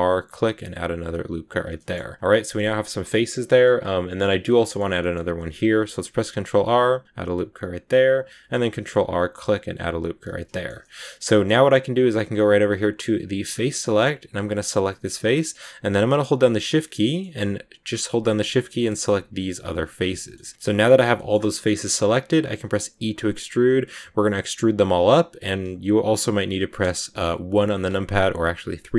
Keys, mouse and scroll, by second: 1.6 middle click, 2.0 scroll up 1, 2.1-4.8 middle drag, 4.8 scroll down 1, 4.9 middle click, 5.7 ctrl+r, 8.1 ctrl+r, 10.4-13.0 shift+middle drag, 13.0 click, 13.4-14.5 scroll up 1, 14.5 right click, 14.9-16.1 scroll up 1, 16.1 shift+right click, 16.1 shift+scroll down 1, 16.3-18.1 middle drag, 18.1 shift+right click, 18.3-19.7 shift+middle drag, 19.7 shift+right click, 19.8 scroll up 1, 19.9-20.3 scroll down 3, 20.0 shift+middle click, 20.4 middle click, 21.2-22.8 scroll up 3, 21.4 middle click, 22.8 e, 26.2 KP_3.